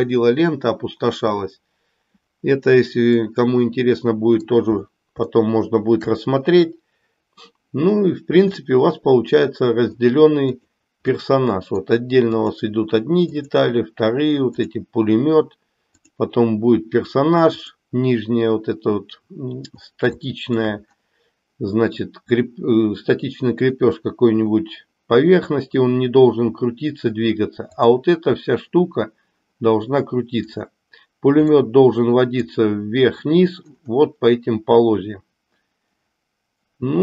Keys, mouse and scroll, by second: 3.2-4.4 middle drag, 5.4 shift+middle click, 8.8-10.0 middle drag, 10.6 drag, 11.2-12.0 middle drag, 12.4 click, 13.4 drag, 16.0 click, 17.4 click, 20.2 shift+middle click, 31.5-32.5 middle drag.